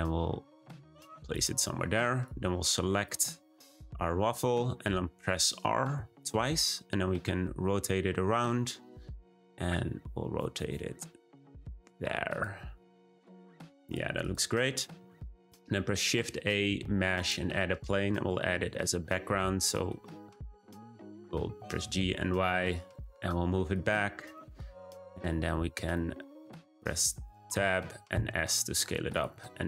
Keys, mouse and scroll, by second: 2.2-3.0 drag, 5.9 r, 12.5 g, 14.1 click, 15.3 shift+a, 17.9 r, 19.5-20.4 scroll down 3, 19.6-20.0 middle drag, 20.4-21.1 middle drag, 21.1 scroll down 1, 21.4 g, 24.3-25.1 middle drag, 25.1-25.9 scroll down 2, 25.9-27.0 shift+middle drag, 27.0 Tab, 28.0 s, 29.2 `.